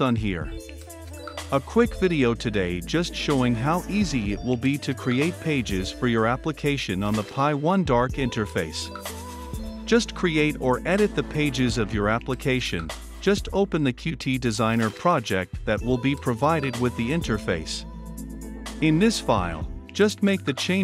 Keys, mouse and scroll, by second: 13.1 r, 13.3 e, 13.5 d, 15.9-20.8 drag.